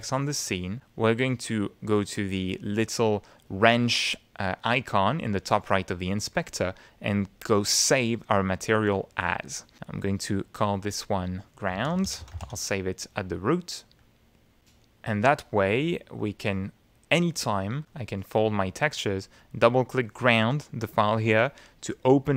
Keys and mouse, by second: 4.1 click, 8.2 click, 10.1 click, 10.6 click, 11.2 click, 11.5-12.9 typing, 14.0 click, 14.8 click, 16.2 click, 17.9 click, 19.4 click.